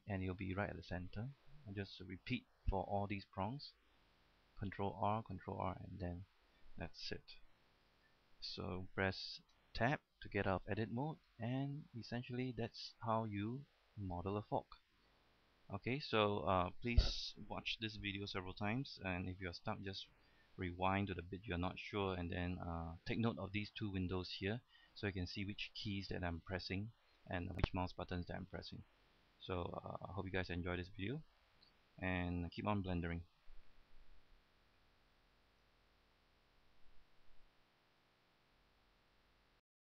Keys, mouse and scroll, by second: 2.3 ctrl+r, 3.0 middle click, 5.0 ctrl+r, 5.0 middle click, 5.6 ctrl+r, 6.0 middle click, 6.4-6.9 scroll down 1, 6.9 middle click, 8.1 a, 8.2 scroll down 1, 8.4-9.6 middle drag, 9.8 Tab, 10.3 middle click, 11.6 shift+middle click, 12.4 scroll up 1, 12.6 shift+middle click, 13.2 scroll down 1, 13.5-15.7 shift+middle drag, 16.1 shift+middle click, 35.8 click.